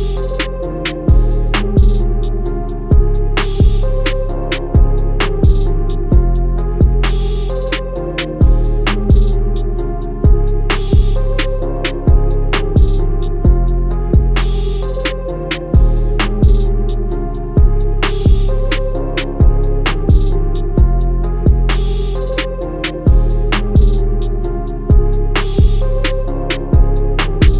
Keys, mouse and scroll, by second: 0.0 click, 0.0-0.3 scroll down 2, 0.5 scroll up 1, 0.6 click, 6.3 scroll down 1, 6.5 click, 7.5 z, 7.6 click, 8.5 z, 8.5 click, 10.9 alt+scroll up 1, 11.2 click, 13.0 click, 13.8 scroll up 1, 14.1 click, 14.7 click, 15.0 click, 16.9 scroll up 1, 17.1 alt+scroll down 1, 17.3 alt+scroll up 2, 18.0 click, 19.6 z, 19.8 click, 20.6 z, 21.2 click, 21.8 alt+scroll down 1, 22.1 click, 24.0 alt+scroll down 1, 24.1-25.0 alt+scroll up 4, 25.0 click, 26.7 alt+scroll down 1, 26.8 alt+scroll up 1, 27.2 click.